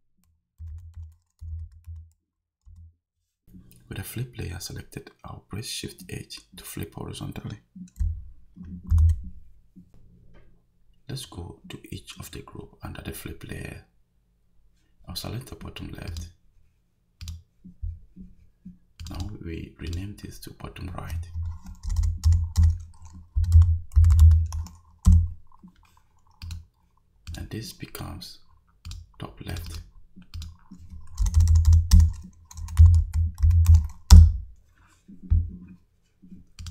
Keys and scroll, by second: 0.4-2.4 typing, 2.7 Return, 8.9 shift+h, 21.9 BackSpace, 23.1-24.7 typing, 25.1 Return, 31.2 BackSpace, 32.6-34.2 typing.